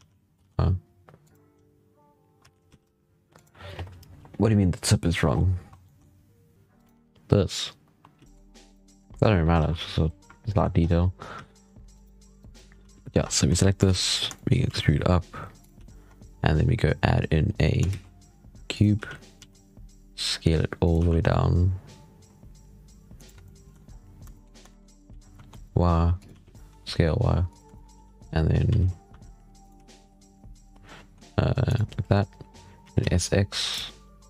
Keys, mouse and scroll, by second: 1.4-2.3 scroll up 7, 2.3 g, 5.2-5.6 scroll down 13, 5.7 middle click, 6.5 shift+middle click, 6.6 right click, 8.1 z, 8.2 middle drag, 8.5 right click, 8.7 scroll down 2, 8.9-9.4 middle drag, 9.4 alt+a, 9.7 scroll down 1, 10.3-10.7 shift+middle drag, 10.7 scroll up 7, 11.2 z, 11.8 right click, 12.2 right click, 12.7 z, 13.0 Tab, 13.3 a, 13.5 scroll down 4, 13.7 shift+middle drag, 13.9 scroll up 1, 14.2-14.5 shift+middle drag, 14.5 e, 15.6 z, 15.9 Tab, 16.1-16.5 scroll up 3, 17.3 scroll down 2, 17.7 shift+a, 18.8 z, 19.2 s, 20.8 g, 23.3-23.7 shift+middle drag, 23.7-24.2 scroll up 6, 24.2-24.7 shift+middle drag, 24.7 scroll up 4, 25.0 s, 26.2 g, 27.6 shift+middle drag, 27.8 z, 28.1 scroll down 2, 28.5 s, 29.6 g, 32.3 scroll down 4, 32.7 s, 34.2 right click.